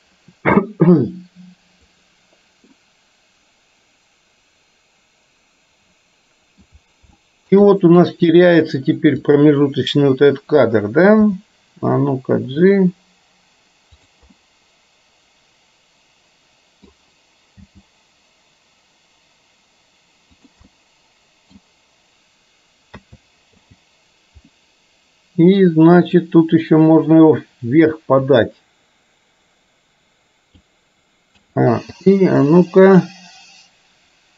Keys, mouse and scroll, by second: 2.0 click, 2.8-6.7 middle drag, 7.2-7.6 shift+middle drag, 7.7-8.1 middle drag, 9.3 click, 14.3-16.8 middle drag, 14.3 scroll up 1, 17.6 g, 20.7-21.7 middle drag, 23.0 a, 23.6 i, 26.1 click, 28.5-30.7 drag, 31.5 a, 32.1 i, 33.1-34.3 drag.